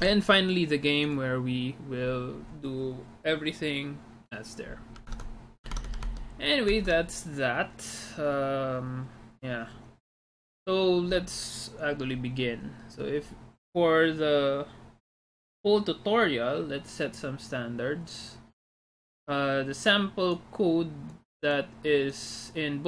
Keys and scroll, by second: 0.1 alt+Tab, 5.2 alt+Tab, 5.8 alt+Tab, 6.3 alt+Tab, 6.8 alt+Tab.